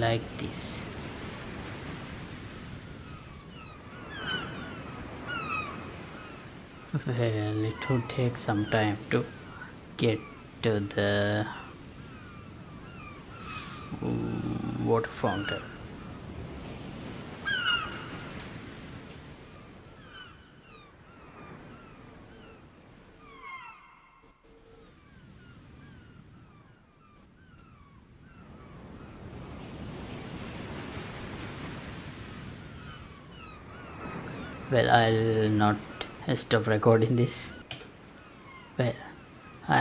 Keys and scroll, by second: 37.8 F9.